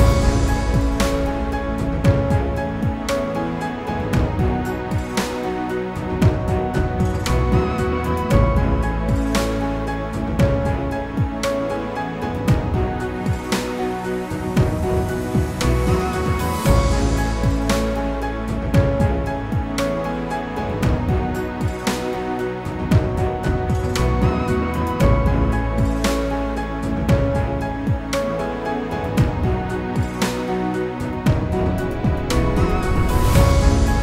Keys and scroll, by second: 9.4 ctrl+g.